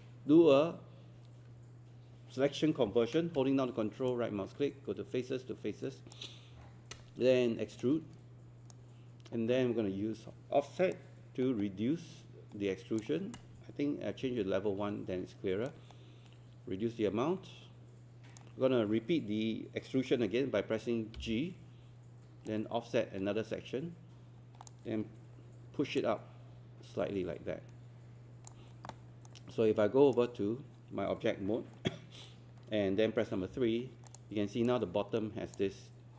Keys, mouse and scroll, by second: 4.1-7.1 ctrl+right drag, 7.8-9.1 shift+right drag, 10.9-13.1 drag, 14.3 1, 15.7-19.1 drag, 21.2 g, 22.5-29.1 drag, 29.3-31.1 right drag, 33.5 3, 34.1 click, 34.7 alt+click.